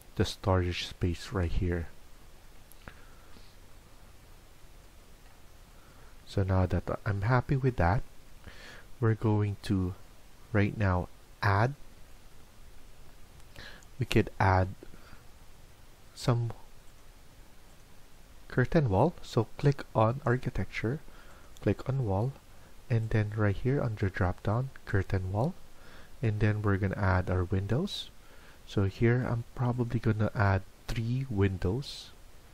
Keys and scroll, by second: 5.9 Escape, 6.2 Escape, 12.9 Escape, 13.2 Escape.